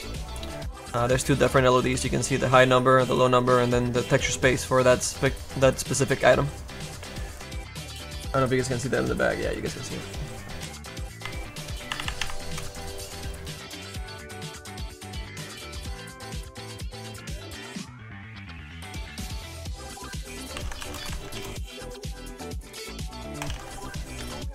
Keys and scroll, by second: 6.9 space, 11.1 F4, 11.9 F4, 12.5 space, 16.1 z, 20.2-24.5 typing.